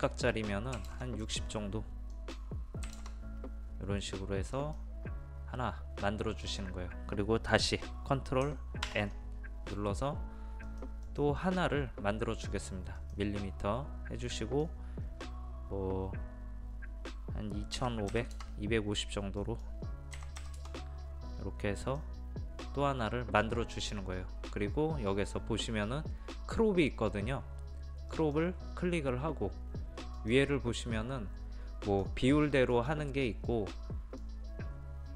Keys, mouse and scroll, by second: 0.8 KP_6, 0.9 KP_0, 2.1 click, 2.9 KP_6, 4.6 click, 8.9 ctrl+n, 10.7 click, 17.8 KP_2, 18.1 KP_5, 18.4 KP_0, 19.4 click, 20.2 KP_2, 20.4 KP_5, 20.6 KP_0, 21.9-35.1 drag.